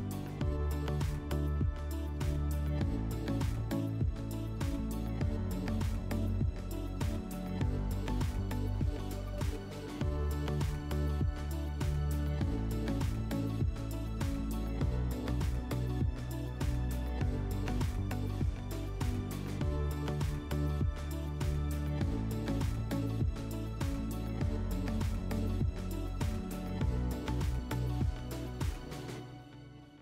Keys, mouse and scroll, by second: 0.8-1.5 drag, 2.1 click, 3.0 click, 4.0 click, 5.3 click, 18.2 click, 22.4 click, 23.4 click, 25.5 click, 26.5 click, 27.0 click, 28.4 click, 28.4 w.